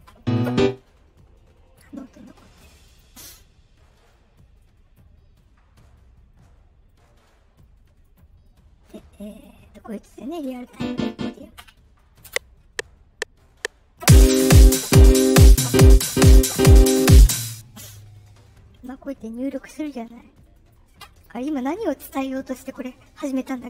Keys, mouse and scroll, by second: 2.8 click, 3.9 middle click, 4.5 right click, 5.1 middle click, 6.2 middle click, 8.0 click, 9.2 click, 12.2 space, 17.2 r, 17.2 space, 20.3 right click, 23.6 middle click.